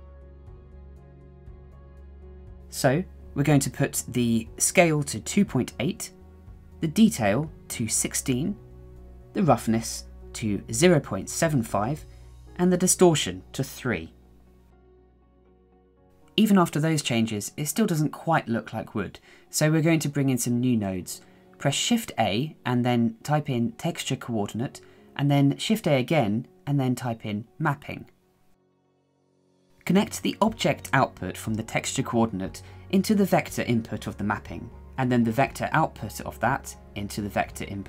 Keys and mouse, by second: 1.8 shift+middle drag, 2.6 shift+middle click, 4.0 shift+middle click, 6.7-8.2 drag, 8.8-10.0 drag, 10.3-12.7 drag, 13.4-16.2 drag, 16.2 click, 19.5 click, 19.8 shift+middle click, 20.6 shift+a, 24.7 shift+a, 26.4 p, 29.2-30.7 drag, 32.7-34.9 drag.